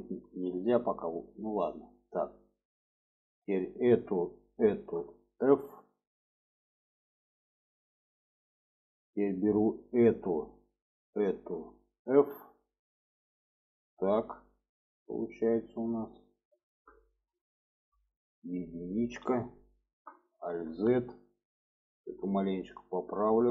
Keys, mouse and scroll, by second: 1.9 middle click, 2.3 click, 2.6 middle click, 3.7 click, 4.5 shift+click, 5.6 f, 6.0 click, 6.7 middle click, 7.7 middle click, 8.6 middle click, 10.0 click, 11.1 shift+click, 12.1 f, 12.6 click, 13.1-15.7 middle drag, 16.1 alt+middle click, 16.9 shift+middle click, 17.6 shift+middle click, 19.0 1, 19.8 middle click, 20.7 alt+z, 21.9 click, 23.2-23.5 drag.